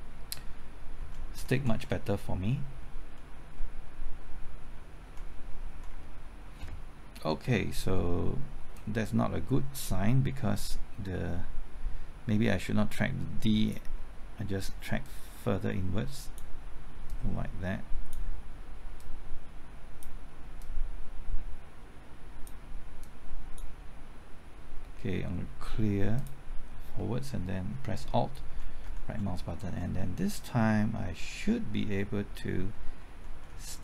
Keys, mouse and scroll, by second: 0.4 typing, 1.0 alt+Right, 1.4 alt+Right, 1.6 alt+Right, 1.8 alt+Right, 2.1 alt+Right, 4.8-5.9 typing, 8.8-24.3 drag, 28.5 alt+Right, 28.8 alt+Right, 29.1 alt+Right, 29.3 alt+Right, 29.5 typing, 33.3-33.8 typing.